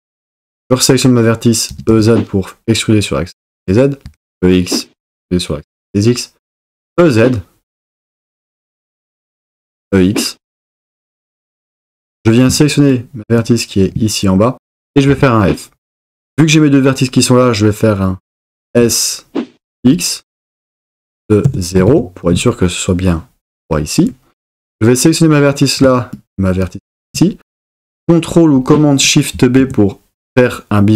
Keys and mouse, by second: 1.7 e, 1.9 z, 3.6 click, 4.1 e, 4.3 x, 5.8 click, 6.6 e, 6.9 z, 9.1 click, 9.6 e, 9.8 x, 11.5 click, 15.1 f, 18.7 s, 19.8 x, 21.4 shift+KP_0, 21.9 KP_Enter, 29.3 super+b.